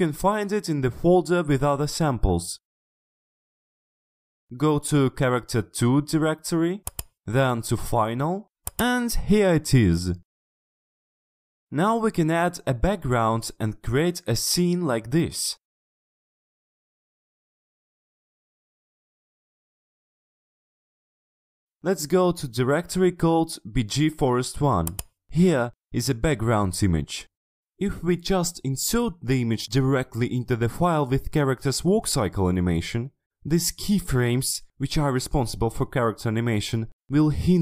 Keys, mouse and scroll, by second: 1.5 click, 7.0 click, 8.8 click, 11.6 click, 15.7 click, 16.6 click, 20.7-21.9 drag, 24.9 click, 27.9 click, 29.1 click, 30.4 click, 31.1 click, 31.4 click, 31.8 click, 32.1 click, 33.2 click.